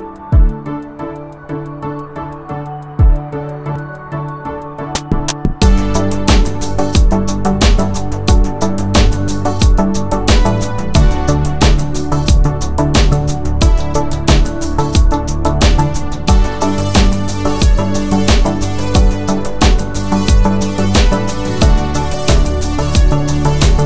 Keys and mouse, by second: 3.1 shift+middle drag, 3.5-4.0 middle drag, 4.4 shift+middle click, 4.8 shift+middle click, 7.6 click, 8.8 click, 9.9 s, 13.8-14.7 ctrl+drag, 13.8-14.7 ctrl+right drag, 14.8-15.3 drag, 14.8-15.3 right drag, 15.6 shift+click, 16.3-16.7 drag, 17.0 shift+click, 19.8 s.